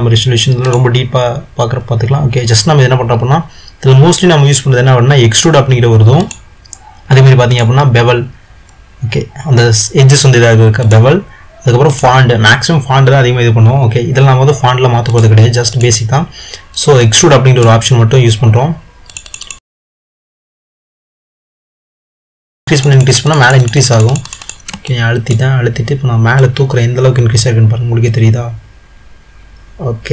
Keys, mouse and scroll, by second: 0.7-1.3 drag, 6.4 click, 7.6 drag, 10.9-11.3 drag, 12.1 click, 15.2 click, 15.8 click, 17.2-19.2 middle drag, 19.2 click, 25.0-26.5 middle drag, 26.5 click.